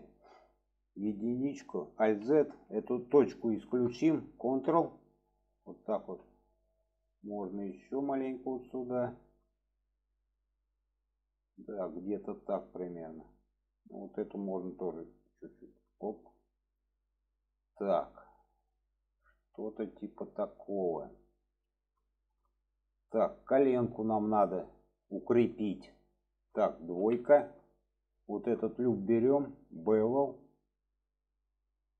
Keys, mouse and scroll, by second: 2.0 alt+z, 4.6-5.3 ctrl+drag, 6.0 alt+z, 6.4-6.8 middle drag, 7.7-9.0 drag, 9.2-10.1 middle drag, 11.1-13.1 middle drag, 13.4 middle drag, 15.2 click, 16.6 click, 17.3-18.2 middle drag, 18.7-21.4 middle drag, 22.1 shift+middle click, 22.9 shift+middle click, 23.8 shift+middle drag, 24.7-25.4 shift+middle drag, 29.8 click, 30.7 click.